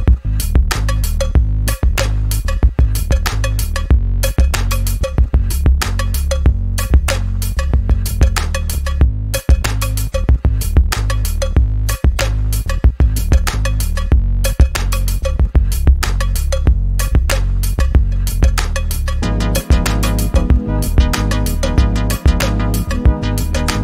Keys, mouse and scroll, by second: 5.0-5.8 alt+drag, 7.1-8.0 shift+drag, 9.5 shift+click, 10.6-11.6 click, 15.6 ctrl+g, 16.0 click, 17.4 ctrl+z, 18.4 click, 21.8 ctrl+z, 22.2 click.